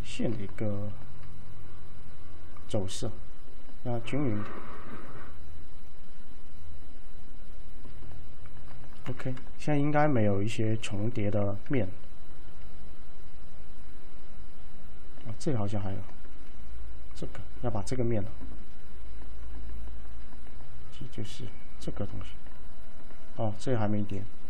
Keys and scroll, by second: 9.2 F3, 23.7 alt+c.